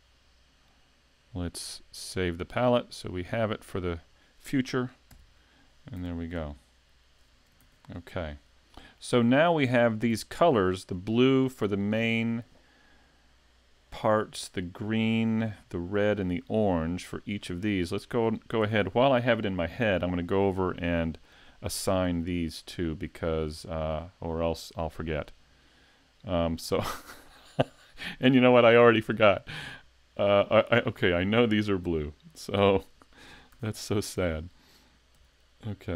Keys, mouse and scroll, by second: 2.1 click, 3.1 click, 5.1 shift+k, 6.0 a, 6.7 shift+middle click, 7.6 s, 8.3 scroll down 1, 8.7 shift+middle click, 9.4 middle click, 14.1 middle click, 15.3 middle click, 21.7 click, 22.4 shift+middle click, 23.2-23.6 scroll up 1, 23.6 shift+middle click, 24.1-24.8 scroll up 1, 31.0 right click, 32.6 Tab, 33.5 a, 35.2 l.